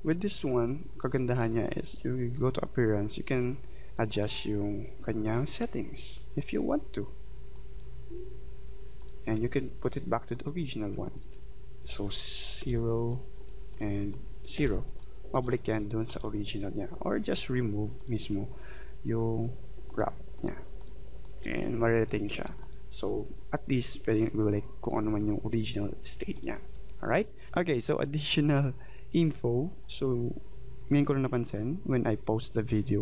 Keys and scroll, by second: 12.6 0.